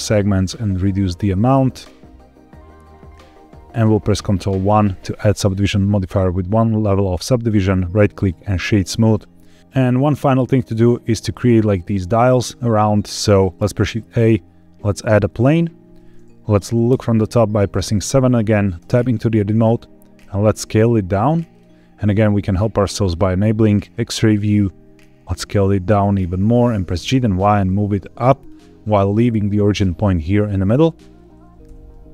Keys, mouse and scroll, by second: 4.6 ctrl+1, 7.4 right click, 9.1 scroll down 1, 9.4 middle click, 13.5 shift+a, 16.8 KP_7, 18.7 Tab, 20.1 s, 21.4 click, 22.9 click, 24.2 s, 26.4 click, 26.8 g, 27.0 y, 28.3 click, 31.4 g, 31.6 y.